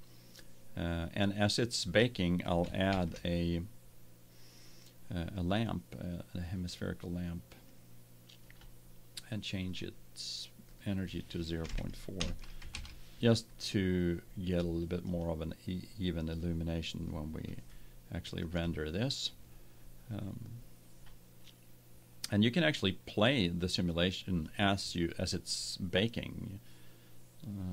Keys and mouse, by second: 2.8 shift+a, 7.8-9.4 drag, 9.6-12.5 drag, 15.1-16.3 drag, 16.3-17.0 middle drag, 17.0-18.2 drag, 18.3 middle click, 18.4-21.2 middle drag, 24.4-26.3 drag.